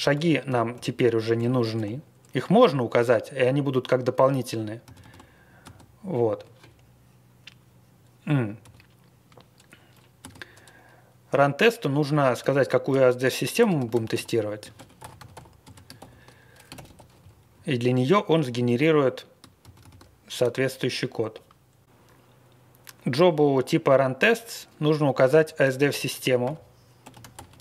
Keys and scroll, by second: 0.1 ctrl+a, 0.4 ctrl+k, 0.7 ctrl+k, 4.8 ctrl+c, 4.9 ctrl+c, 5.6 space, 8.6 a, 10.1 space, 12.1-17.4 typing, 17.1 Home, 19.7 ctrl+c, 19.8 ctrl+c, 25.3-27.6 typing.